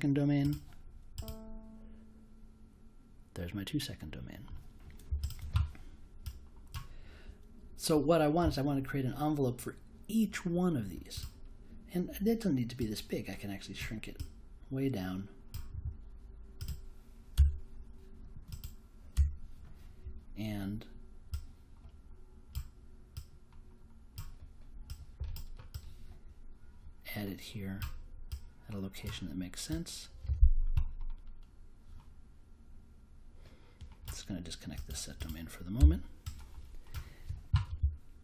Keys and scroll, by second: 17.3 BackSpace, 19.1 BackSpace, 35.7 BackSpace.